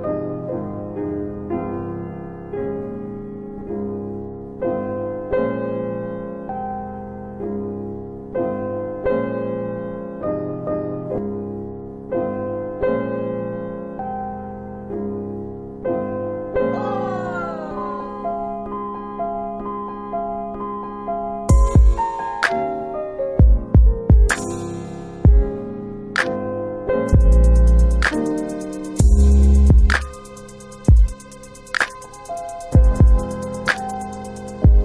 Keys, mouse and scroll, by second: 0.0 alt+click, 2.3 alt+right click, 2.6 alt+click, 2.8 alt+click, 3.6 alt+click, 5.1 alt+click, 9.3 click, 9.6 alt+click, 10.9 alt+click, 11.6 alt+middle click, 13.5-13.9 scroll up 1, 14.3 alt+click, 19.3 scroll down 1, 22.5 click, 22.5 scroll up 1, 24.2 click, 26.1 click, 29.2 click, 33.3 click, 34.2-34.5 scroll down 1.